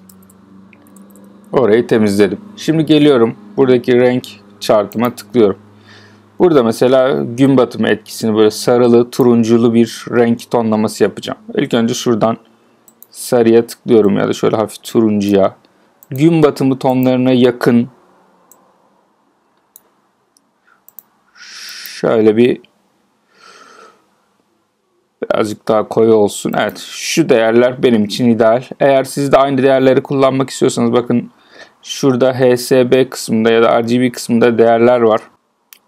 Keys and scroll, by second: 0.7 alt+super+z.